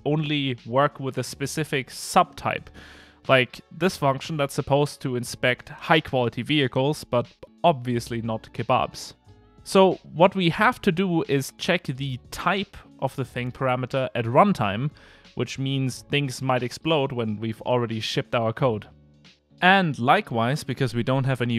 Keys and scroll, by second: 3.7 Return, 7.1 Return, 10.3 ctrl+space, 11.3 Escape, 12.0 alt+Return, 12.7 alt+shift+Left, 16.7 Return.